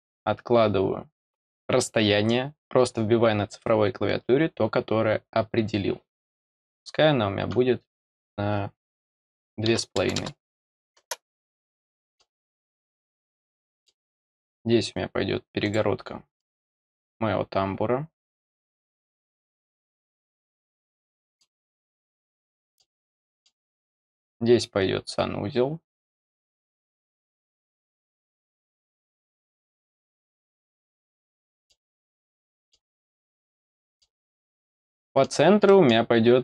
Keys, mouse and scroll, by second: 11.7 middle click, 12.6 middle click, 13.4 middle click, 14.1 scroll down 2, 14.5-15.6 scroll up 2, 15.6 click, 16.3 middle click, 20.2 click, 20.8 scroll down 2, 21.1 middle click, 21.6 scroll down 2, 22.2 middle click, 23.1 middle click, 24.0 scroll up 2, 25.8 click, 28.1 click, 29.4 click, 30.4 click, 31.1 scroll down 2, 31.3 middle click, 32.3 middle click, 33.2 scroll up 2, 33.6 middle click, 34.3-34.7 scroll down 2, 34.9 middle click, 35.6 middle click.